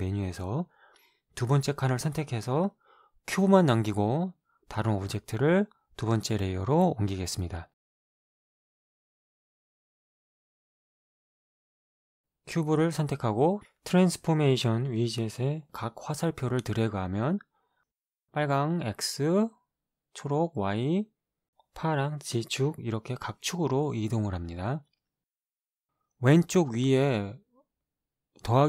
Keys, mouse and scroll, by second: 1.5 click, 5.6 click, 8.1 shift+click, 13.6 right click, 17.0-23.5 drag, 24.3-26.1 drag, 27.8-28.6 drag.